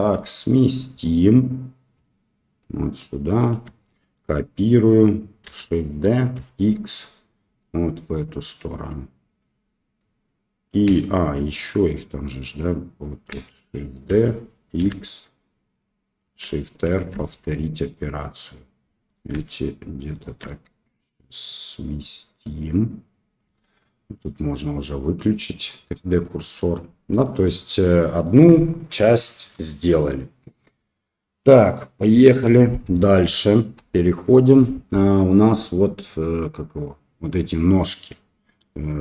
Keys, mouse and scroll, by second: 1.9-3.0 drag, 3.8-4.1 shift+middle drag, 5.4 shift+d, 12.3 click, 14.0 shift+d, 16.8 shift+r, 19.0 click, 20.1 shift+click, 21.5-23.3 drag, 24.1-25.5 drag, 26.2-26.6 middle drag, 27.2-28.2 middle drag, 33.7 KP_1.